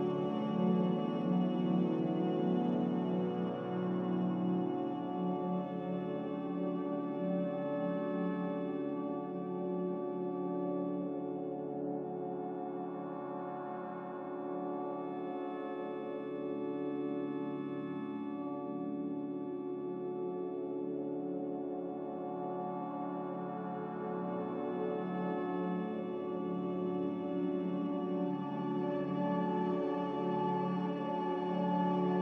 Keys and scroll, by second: 0.4-1.1 typing, 3.8 ctrl+z, 18.0 z, 19.0 ctrl+c, 23.4 Escape, 26.8 ctrl+c, 27.8 g, 29.4 z.